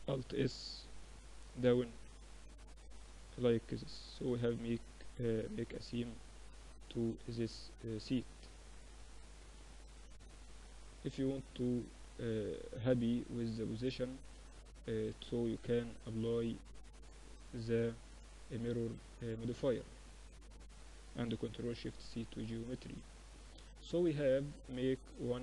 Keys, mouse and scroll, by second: 2.0 Tab, 2.3 middle click, 3.1 middle click, 5.1-10.8 middle drag, 10.9-16.3 middle drag, 14.5 Tab, 15.7 ctrl+r, 17.0 Tab, 17.2 middle click, 18.1-19.5 drag, 18.8 Tab, 19.2 Tab, 19.5 middle click, 20.3 ctrl+alt+shift+c, 21.2 z, 21.9 z, 22.9 a, 23.0 a.